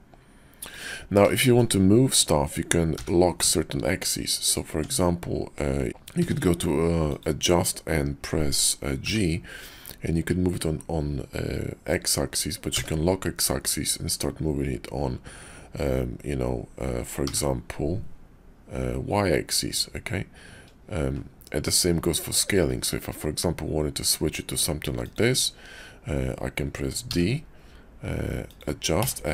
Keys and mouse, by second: 1.3 shift+middle click, 1.4 shift+click, 2.9 g, 4.7 Tab, 6.2 d, 27.1 d.